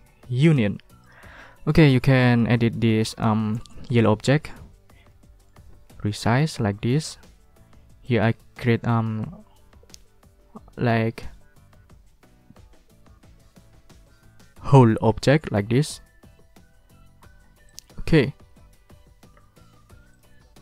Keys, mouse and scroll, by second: 0.4 click, 1.0 click, 1.5 ctrl+click, 1.9 ctrl+scroll up 2, 2.2 ctrl+middle click, 2.5 ctrl+scroll up 2, 2.5 ctrl+middle click, 2.7 ctrl+scroll down 2, 2.9 ctrl+scroll up 2, 3.1 ctrl+click, 3.4 ctrl+middle click, 4.7 ctrl+scroll down 2, 4.9 ctrl+click, 6.5 ctrl+click, 8.0 click, 17.6 ctrl+click, 18.6 ctrl+middle click, 20.1 ctrl+middle click, 20.5-20.6 ctrl+scroll up 2.